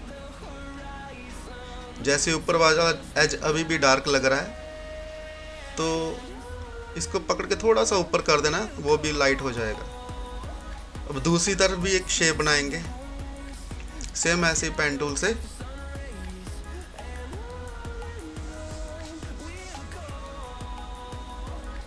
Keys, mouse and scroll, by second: 1.3 typing, 5.5 typing, 7.1-9.3 drag, 7.1 typing, 9.9 scroll down 1, 11.0 scroll up 1, 13.6 click, 13.6 typing, 14.8-15.6 scroll up 1, 15.6-21.8 drag.